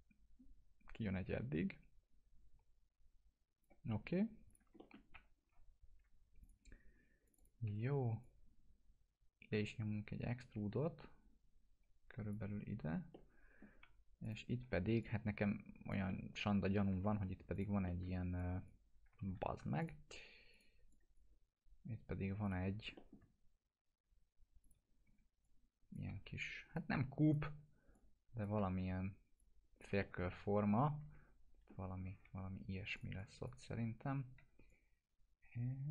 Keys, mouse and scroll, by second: 4.8 alt+middle click, 5.1 F3, 6.4 click, 7.4-8.3 typing, 8.2-12.6 drag, 13.1-13.7 alt+middle click, 13.8 1, 14.2 click, 14.6 w, 15.0-15.9 click, 16.1-17.0 alt+middle click, 17.1 2, 17.5 alt+click, 17.8 alt+middle click, 18.4 click, 19.4 ctrl+z, 19.8 click, 23.0 alt+middle click, 24.6 click, 25.0 w, 25.4-26.0 click, 26.1 e, 26.7-27.4 click, 27.4-29.3 typing, 27.9-28.5 click, 29.4-30.0 click, 30.0-31.9 alt+middle drag, 32.2 1, 32.9 click, 34.4 w, 34.7-35.9 drag.